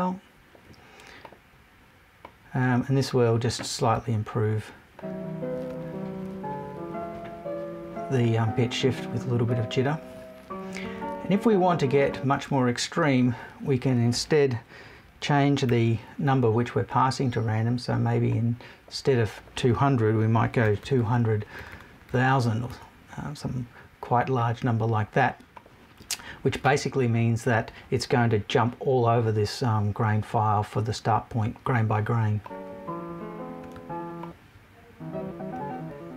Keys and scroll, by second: 22.7 BackSpace.